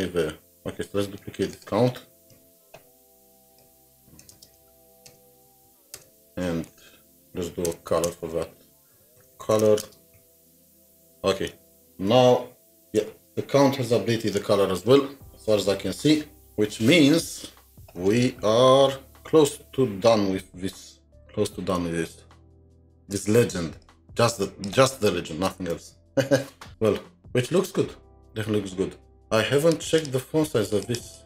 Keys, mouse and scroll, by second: 0.0-2.0 scroll down 2, 2.3 alt+shift+Down, 4.2 BackSpace, 4.3 space, 5.1 Return, 5.5 Left, 5.7 Left, 5.9 Return, 6.7 typing, 7.9-10.3 typing, 11.5 alt+Tab, 12.9 alt+Tab, 21.5-22.1 alt+scroll down 2, 22.1 alt+scroll, 22.1 ctrl+Tab, 23.3-25.4 space, 30.0 space, 31.0 double click.